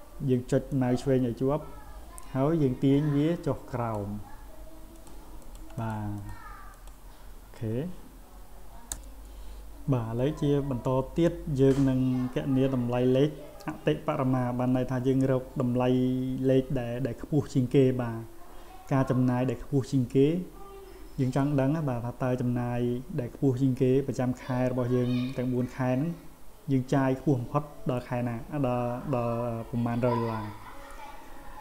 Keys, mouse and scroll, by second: 0.7-3.9 drag, 5.0 click, 5.4 click, 5.8 click, 6.2 click, 6.7 click.